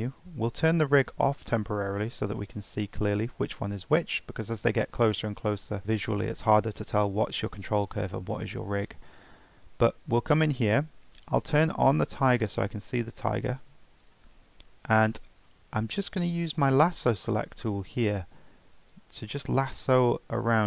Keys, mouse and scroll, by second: 2.2 click, 4.9 click, 9.5 Tab, 12.3 click, 14.0 click, 15.9-16.8 drag, 18.9 click.